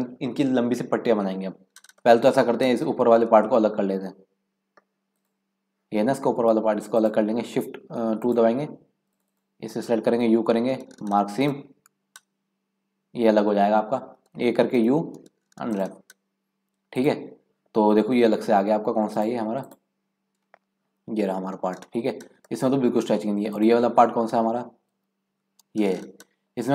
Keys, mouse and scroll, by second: 2.0 shift+middle click, 2.5-3.0 scroll up 4, 3.5-5.1 middle drag, 5.1 click, 6.9 click, 8.2 click, 9.0 alt+shift+click, 9.2 alt+shift+click, 10.2 u, 13.7-14.0 scroll down 3, 14.0 a, 14.7 u, 16.9 click, 19.1 click, 19.6 click, 21.2 scroll down 1, 21.3-21.6 scroll up 3, 22.3-22.6 scroll up 2, 22.6 shift+middle click, 23.5 click, 24.9 KP_Decimal, 25.5-26.7 scroll down 14.